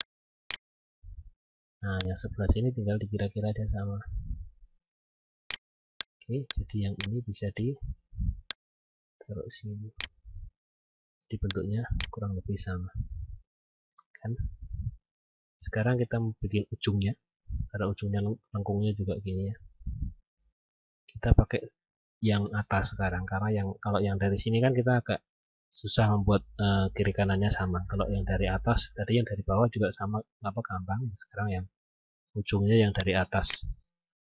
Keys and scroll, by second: 6.1 F10, 11.0 F9, 34.0 F10.